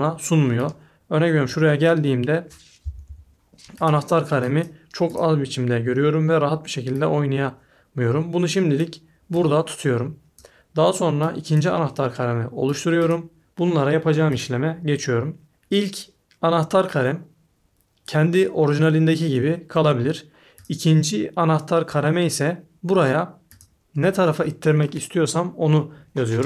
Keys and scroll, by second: 2.8 Left, 3.0 Right.